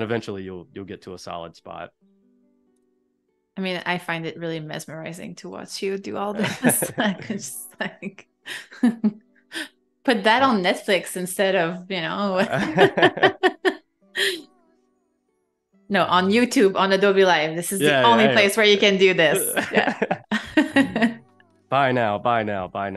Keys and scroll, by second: 1.0 a, 2.8 i, 3.2 a, 6.7 i, 7.3 a, 7.7 space, 14.0 space, 16.5 space, 18.6 space, 21.4 v.